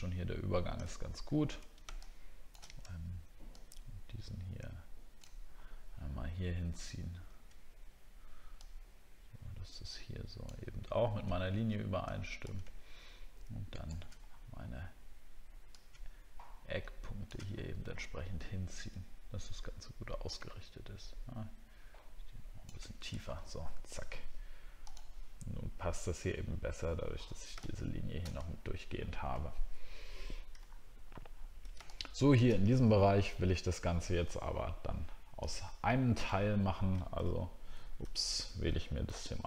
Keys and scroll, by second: 0.9 alt+scroll down 1, 5.5-8.4 alt+scroll up 3, 23.2 alt+scroll down 1, 28.5 alt+scroll down 1, 30.6 alt+scroll up 1, 36.3 alt+scroll down 1.